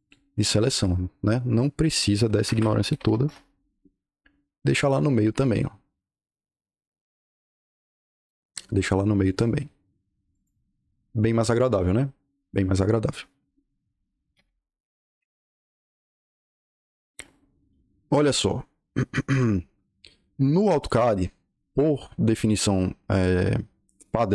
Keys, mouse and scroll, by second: 0.0-2.3 drag, 2.3 Escape, 2.5-3.5 typing, 4.9 click, 5.3 click, 5.9 click, 6.7 click, 9.1 click, 10.2 click, 14.0-14.8 typing.